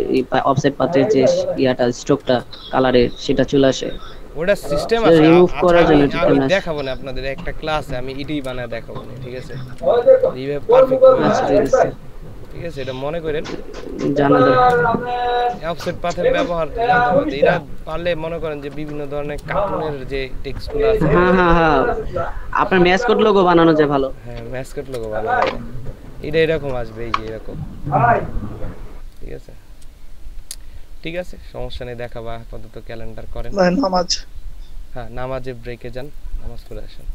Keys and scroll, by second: 1.1 ctrl+space, 8.9 ctrl+space, 13.8 ctrl+space, 14.2 ctrl+space, 17.5 ctrl+space, 24.9 ctrl+alt+shift+s.